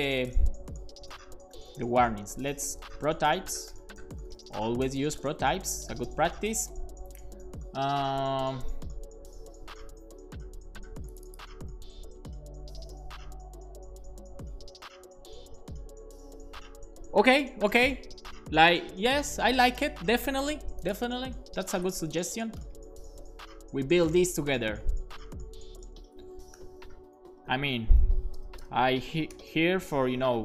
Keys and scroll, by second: 0.8 shift+super+Left, 1.1-4.5 typing, 6.3 Return, 6.6 Right, 11.6 super+c, 21.7 Return, 21.8 Return, 21.8-29.3 typing, 26.1 alt+shift+Left, 29.8 Return.